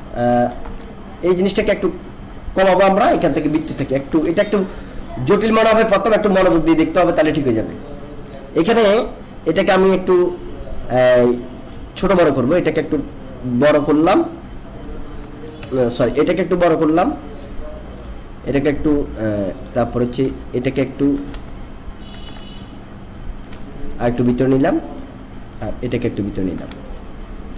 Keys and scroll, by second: 15.6 ctrl+z, 22.1 ctrl+z.